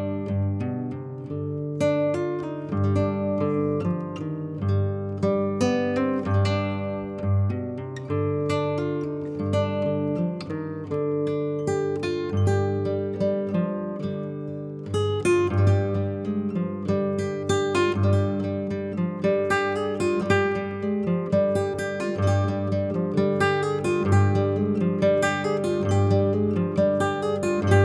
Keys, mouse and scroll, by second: 0.0 x, 0.2-0.8 scroll up 4, 0.8-2.4 scroll down 1, 2.4 Tab, 3.3-5.7 typing, 4.2 click, 4.5 click, 4.7 middle click, 5.6 click, 5.7 click, 6.4 click, 6.5 click, 6.6 click, 6.8 g, 7.1 click, 7.3 shift+click, 8.2 g, 8.4 click, 8.7 shift+click, 8.8 shift+click, 9.3 click, 9.5 g, 9.6 click, 9.7 g, 9.8 click, 10.2 shift+click, 10.3 shift+click, 10.6 r, 11.1-11.7 scroll down 5, 11.2 middle click, 11.5 click, 11.7 middle click, 12.1-14.3 typing, 15.9 g, 17.0 click, 17.2 Delete, 18.0 click, 18.5 r, 19.2 click, 19.4 click, 21.0 click, 21.1 click, 21.3-22.5 scroll up 4, 23.2 click, 23.4 click, 25.5 click, 25.5-25.9 scroll down 4, 26.5 click.